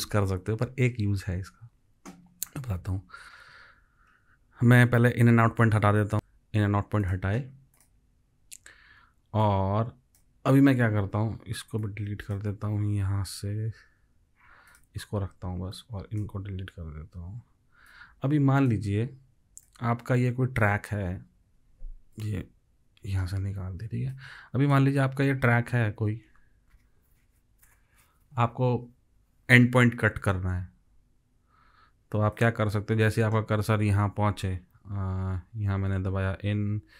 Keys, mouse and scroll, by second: 6.1 ctrl+shift+z, 13.9 Delete, 17.2 Delete, 21.4 alt+click, 22.9 Delete, 25.2 space, 33.2 space, 35.9 i.